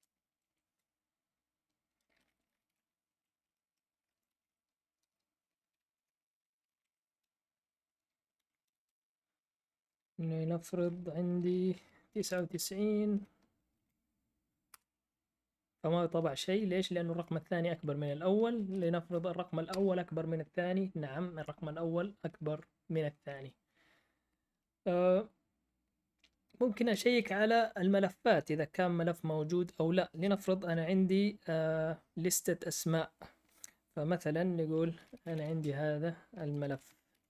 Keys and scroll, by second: 0.0-8.9 typing, 5.0 Return, 11.8-13.7 typing, 18.7-20.2 typing, 34.7-37.2 typing.